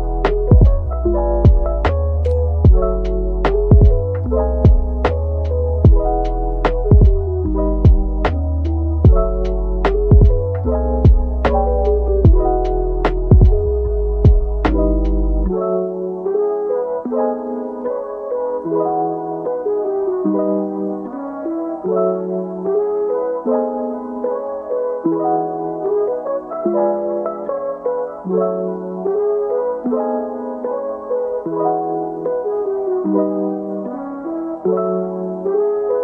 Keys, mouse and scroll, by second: 0.9 ctrl+z, 1.1 scroll up 1, 2.3 alt+shift+click, 11.2-12.5 scroll down 1, 12.5-12.8 scroll up 1, 14.1-14.6 scroll down 1, 14.6 middle click, 15.2 Tab, 22.1-23.4 scroll up 1, 23.9-26.8 scroll down 1, 26.8-30.4 scroll up 1, 32.4 Tab, 33.4 shift+double click, 33.6 shift+click, 34.4-36.0 scroll up 1.